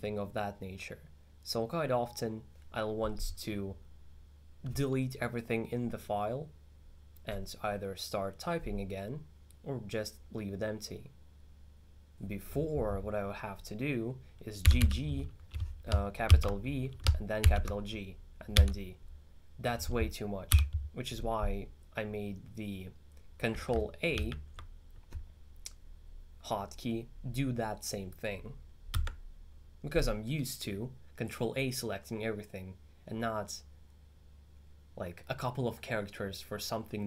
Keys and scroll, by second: 14.7 g, 14.9 g, 16.3 shift+v, 17.4 shift+g, 18.6 d, 20.5 u.